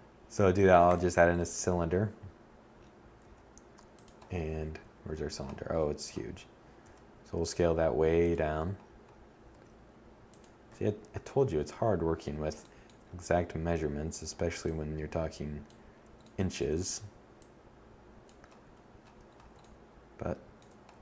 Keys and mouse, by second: 1.6 s, 2.4 click, 2.8 KP_1, 5.2 s, 6.3 click, 6.6-7.2 middle drag, 7.8 s, 9.0 7, 13.0-14.6 middle drag, 17.0 1.